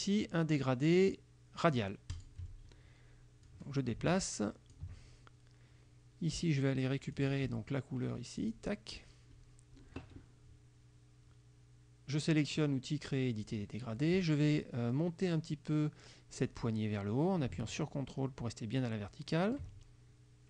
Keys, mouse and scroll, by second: 2.2 click, 3.5-5.0 drag, 7.2 click, 8.5 click, 13.6 click, 16.6-19.8 drag.